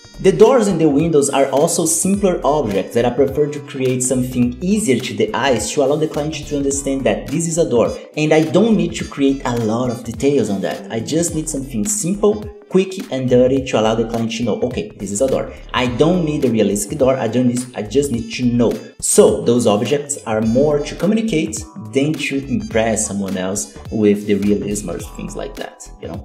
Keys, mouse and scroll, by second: 0.9 KP_7, 1.1 shift+middle click, 1.2-1.8 scroll up 6, 1.3 shift+middle click, 1.8 click, 2.3 shift+a, 4.0 g, 4.4 click, 4.5 z, 4.5 middle click, 4.6 Tab, 4.8 a, 6.1 scroll down 1, 6.1 middle click, 6.5 ctrl+z, 6.7 e, 7.8-11.9 typing, 8.2 shift+middle click, 8.3 scroll up 2, 8.4 alt+a, 8.6 middle click, 9.3 middle click, 9.7 click, 10.4 click, 10.4 shift+middle click, 11.1 click, 11.2 ctrl+l, 11.3 shift+middle click, 11.6 click, 11.9 ctrl+l, 11.9 shift+middle click, 12.1 shift+middle click, 12.2 scroll down 3, 12.2 middle click, 13.2 shift+middle click, 13.2 scroll up 3, 13.3 middle click, 13.4 scroll, 13.7 KP_7, 13.7 z, 13.8 Tab, 13.9 shift+middle click, 14.0 scroll up 2, 14.1 alt+a, 14.6 shift+middle click, 14.8 click, 15.1 z, 15.4 scroll down 10, 15.4 middle click, 15.5 Tab, 15.9 KP_7, 15.9 z, 16.2 middle click, 16.4-17.5 shift+middle drag, 18.4 click, 19.0 click, 19.2 Tab, 19.3 scroll down 1, 19.4 middle click, 19.5 alt+a, 19.6 KP_7, 19.7 z, 20.0 z, 20.4 shift+middle click, 20.7-21.2 scroll up 3, 20.9 shift+middle click, 21.2 Tab, 21.3 middle click, 21.6 scroll down 3, 21.7 middle click, 22.4 right click, 22.7 ctrl+l, 23.2 click, 23.3 Tab, 23.4 KP_7, 23.5 alt+a, 23.6 scroll down 2, 23.7 shift+middle click, 24.2 scroll up 2, 24.9 scroll down 1, 24.9 middle click, 25.2 Tab, 25.2 scroll up 1, 25.7 shift+right click, 25.9 ctrl+l.